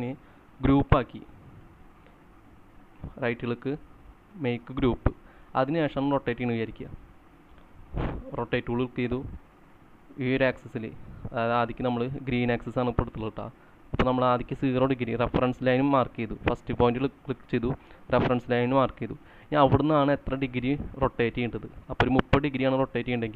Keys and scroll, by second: 23.0-23.3 typing.